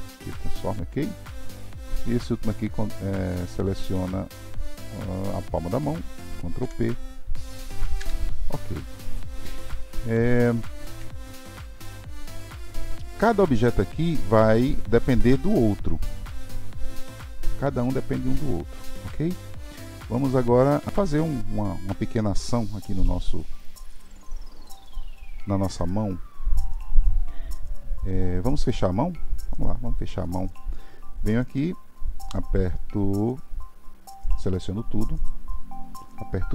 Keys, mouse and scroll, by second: 1.4-1.7 drag, 1.7 ctrl+p, 5.2 shift+click, 6.6 ctrl+p, 9.2-9.8 scroll down 3, 9.8-15.6 shift+middle drag, 23.4-25.9 drag, 25.9-29.0 middle drag, 34.6-36.5 drag.